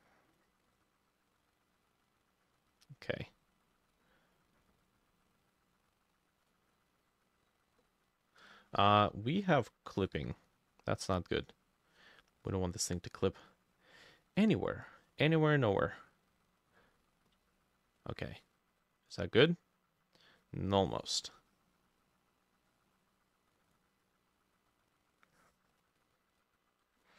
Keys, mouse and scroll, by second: 0.8 double click, 2.8 double click, 3.7 double click, 4.1 double click, 6.5 double click, 6.9 double click, 7.3 double click, 10.2 e, 26.9-27.1 shift+middle drag, 27.0 shift+click.